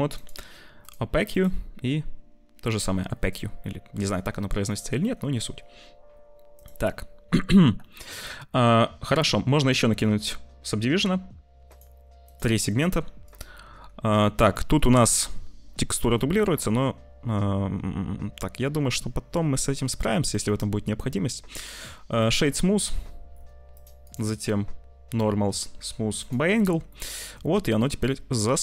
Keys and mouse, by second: 0.0 click, 1.3-2.7 drag, 3.6 middle click, 4.6 middle click, 6.4 middle click, 7.8 shift+middle click, 11.7 middle click, 12.1 click, 13.1 click, 14.6 click, 16.1-19.8 middle drag, 20.2 middle click, 21.6 click, 24.0-26.2 drag, 27.0-28.2 middle drag.